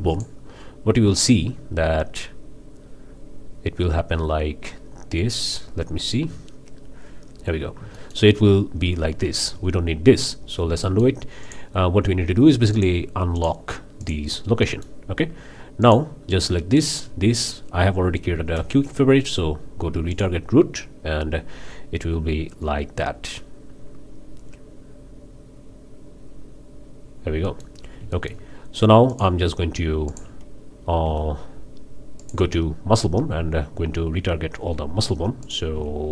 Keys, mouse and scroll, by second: 0.1 click, 7.4 scroll down 2, 7.9-8.3 shift+drag, 9.5 ctrl+z, 10.5 ctrl+scroll up 3, 10.8 shift+middle click, 11.4-11.7 shift+drag, 12.7-13.0 drag, 13.4 click, 14.0 drag, 14.6 click, 15.8-16.1 drag, 16.8 shift+click, 18.5 q, 20.1 click, 27.4-27.7 middle drag, 27.7 scroll up 3, 28.1-28.5 shift+middle drag, 29.1 shift+middle click, 30.1 shift+middle click, 31.0 q, 32.2 click, 35.4 click.